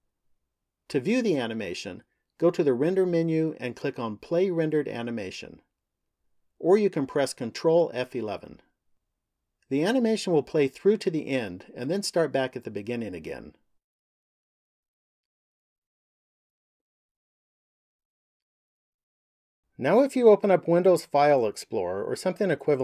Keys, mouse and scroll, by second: 4.4 click.